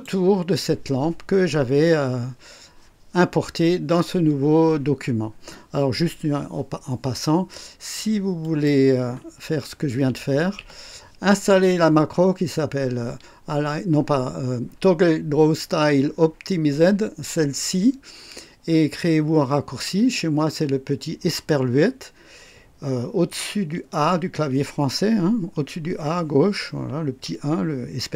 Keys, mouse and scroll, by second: 8.4 click, 9.5-10.6 typing.